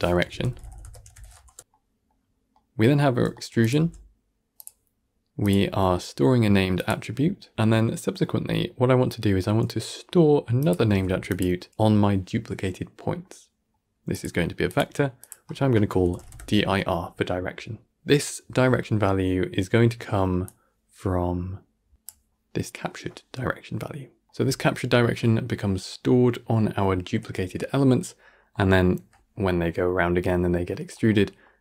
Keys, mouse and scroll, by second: 1.6-3.5 middle drag, 3.5 click, 3.7 g, 5.3 click, 5.6 g, 8.1-10.5 middle drag, 10.5 click, 10.7 shift+d, 11.6 g, 13.1-14.0 middle drag, 14.0-17.9 drag, 17.9-19.8 middle drag, 20.3 click, 24.2-28.0 middle drag, 28.0-28.4 scroll down 3, 28.4-31.6 middle drag.